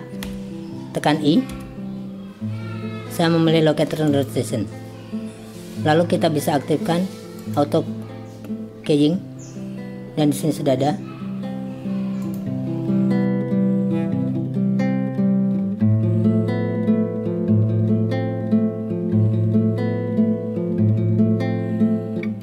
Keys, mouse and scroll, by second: 7.4 click, 12.2 click, 16.1 click, 18.2 click, 20.5 click, 22.3 click.